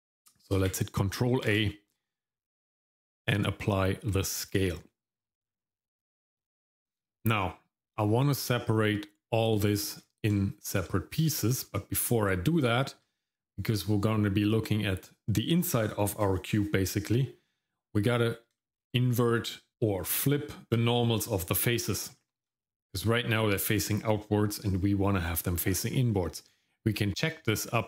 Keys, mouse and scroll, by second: 1.5 ctrl+a, 5.4-6.0 scroll down 1, 6.1 shift+middle click, 6.6-8.5 scroll up 1, 9.6 shift+middle click, 10.4 shift+middle click, 11.2 shift+middle click, 12.8 shift+middle click, 18.6 shift+middle click, 22.2 shift+middle click, 27.1-27.8 drag.